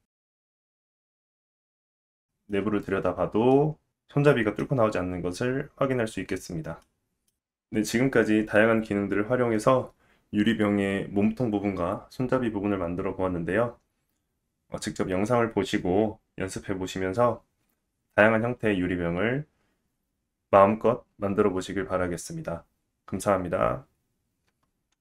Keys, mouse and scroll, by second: 1.8 middle click, 2.9 scroll up 2, 3.3 shift+middle click, 3.9-4.5 scroll up 1, 4.5 scroll up 1, 4.6 middle click, 24.9 middle click.